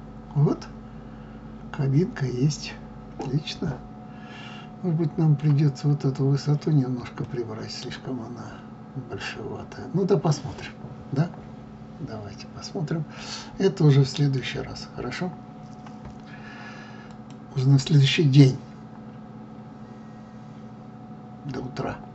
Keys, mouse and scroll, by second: 7.2-10.2 middle drag.